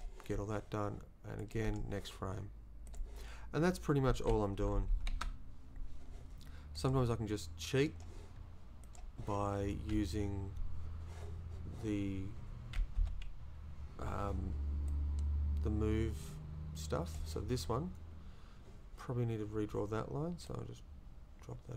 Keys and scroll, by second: 4.6 Right, 5.1 Down, 13.0 Left.